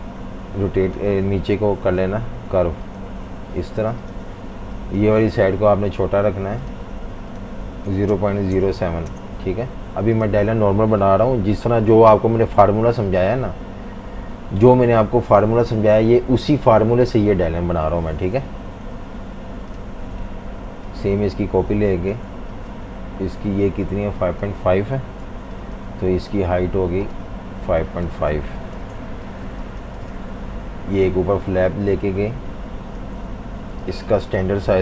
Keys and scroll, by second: 1.5 Page_Down, 3.1 Page_Up, 3.8 shift+v, 7.6-9.9 typing, 13.8 F18, 18.8 F19, 25.0 super+c, 28.6 super+v, 28.8 Return, 29.3 v, 29.4 space, 34.6-34.8 typing.